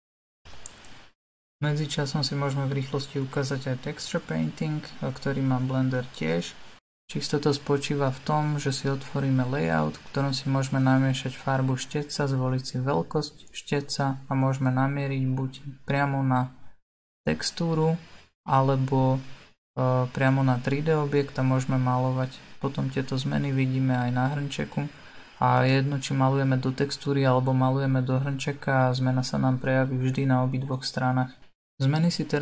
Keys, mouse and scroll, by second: 1.1 click, 2.7 scroll up 6, 3.3-7.6 middle drag, 7.6 click, 13.3-21.2 drag, 23.7-27.3 drag, 27.3 ctrl+z, 27.7 ctrl+z, 29.3-32.4 middle drag.